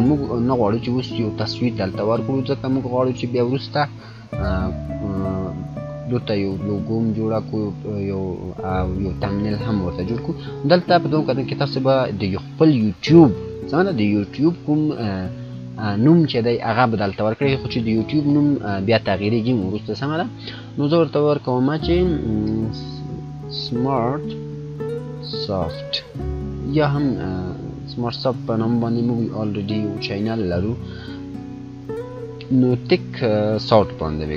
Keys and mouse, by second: 10.9-13.8 drag, 20.7 click, 21.7 shift+s, 22.9-26.3 typing, 33.5-34.3 typing.